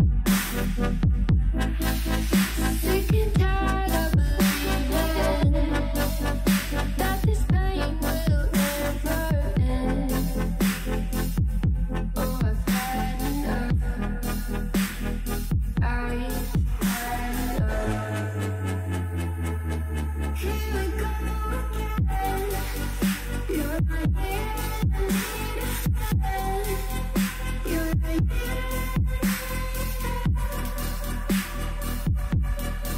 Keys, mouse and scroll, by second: 1.6 KP_7, 2.1-2.4 scroll down 2, 2.4 shift+middle click, 3.1-3.7 scroll up 1, 3.7 click, 4.5 s, 6.2 s, 7.7 click, 8.2 s, 9.9 click, 10.2 s, 11.2 click, 11.5 s, 12.1 shift+middle click, 12.8 click, 13.2 s, 14.2 click, 14.5 s, 15.2 shift+middle click, 15.5-16.1 scroll up 2, 16.1 click, 16.7 s, 17.5 click, 17.8 s, 18.9 click, 19.4 s, 20.0 s, 20.8 shift+middle click, 21.1 click, 21.4 s, 22.2 scroll down 2, 22.5-23.5 middle drag, 23.5 alt+z, 24.4-24.8 shift+middle drag, 24.8 Tab, 25.0 click, 25.2-25.7 middle drag, 25.7 scroll up 4, 25.9 middle click, 26.5 scroll up 1, 26.7-27.8 middle drag, 27.8 scroll down 3, 27.9-32.9 middle drag.